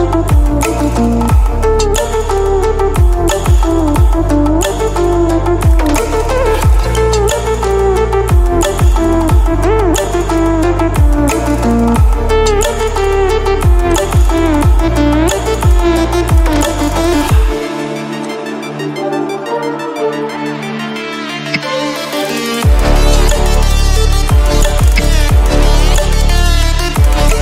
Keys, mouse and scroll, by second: 0.9-4.5 drag, 2.0-6.4 drag, 10.5 alt+shift+click, 12.7-14.1 drag, 14.2-18.4 alt+drag, 20.2-20.8 click, 21.5 Delete, 22.3-23.1 drag, 24.8 shift+m, 27.2-27.4 drag.